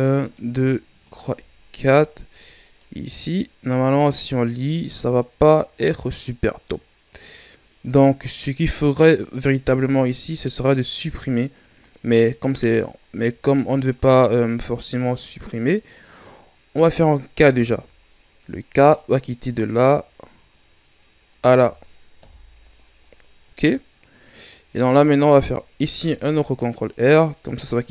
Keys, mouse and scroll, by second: 8.7-9.3 scroll down 4, 9.3-10.0 scroll up 5, 12.9-15.3 ctrl+scroll up 4, 17.5 k, 24.4-25.8 right drag, 25.8 ctrl+r, 27.8 right click.